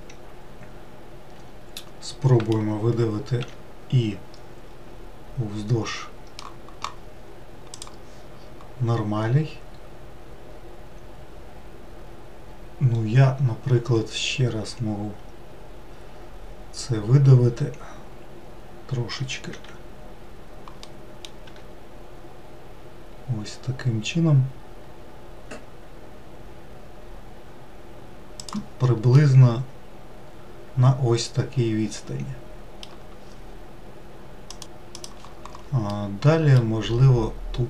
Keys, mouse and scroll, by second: 2.8-3.4 scroll down 2, 3.4 e, 9.9-10.5 scroll down 1, 10.5-13.6 scroll down 1, 14.0-17.0 scroll up 1, 17.7-18.9 scroll down 3, 20.8 middle click, 21.5 e, 29.1-32.2 middle drag, 35.5-36.7 middle drag, 36.7-37.6 scroll up 1.